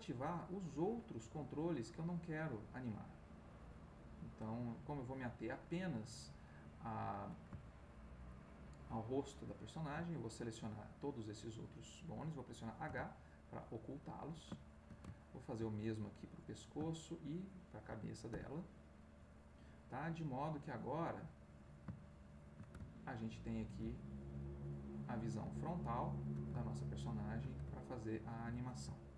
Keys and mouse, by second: 4.0 click, 6.0-7.5 drag, 7.8 shift+middle click, 8.7 shift+click, 10.2-12.0 shift+middle drag, 12.8 h, 13.5-14.5 middle drag, 14.9 shift+middle click, 15.3 ctrl+shift+middle click, 16.3 click, 18.3 h, 19.0-20.0 middle drag, 21.2 click, 22.0-24.1 shift+middle drag, 24.8 click, 25.7 ctrl+middle click, 26.6-27.6 ctrl+shift+drag, 27.8-29.1 ctrl+shift+drag.